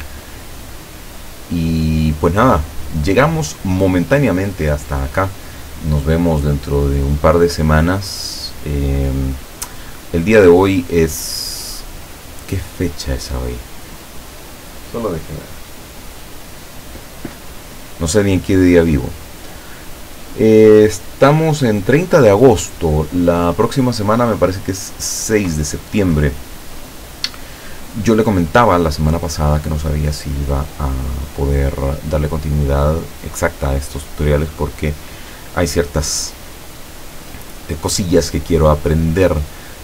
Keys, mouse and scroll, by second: 0.2-0.5 ctrl+scroll down 2, 1.2 ctrl+scroll down 2, 2.5 ctrl+scroll up 2, 5.1-5.5 ctrl+scroll up 2, 5.8 scroll down 2.